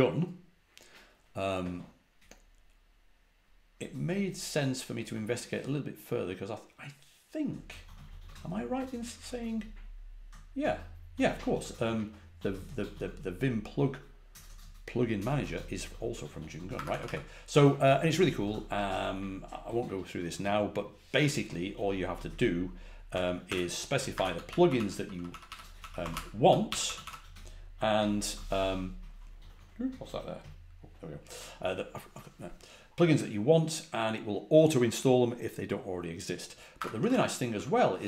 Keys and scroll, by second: 16.7 Escape, 23.0 Escape, 24.0 Escape, 25.0-26.3 typing, 28.4 typing, 36.7 Escape, 36.9-38.0 typing.